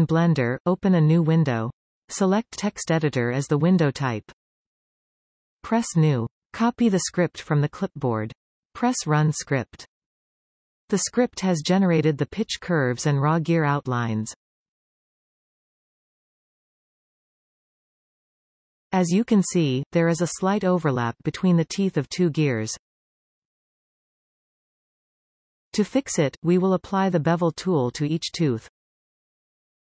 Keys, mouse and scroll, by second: 0.0-6.4 drag, 6.8 click, 7.7 ctrl+v, 10.3 click, 12.4-14.4 drag, 14.4-14.9 scroll down 1, 14.9-16.8 middle drag, 16.8-18.2 scroll up 1, 18.2 KP_1, 18.5 KP_7, 19.2-19.8 scroll up 2, 19.8 shift+middle click, 20.3-21.0 scroll up 4, 21.0-24.8 shift+middle drag, 26.1-27.5 scroll up 2, 27.5-28.9 scroll down 10, 28.9-29.9 middle drag.